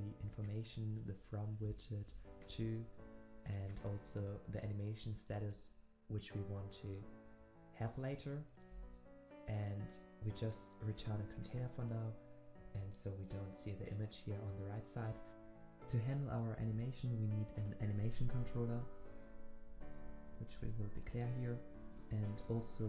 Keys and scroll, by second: 19.2 Return.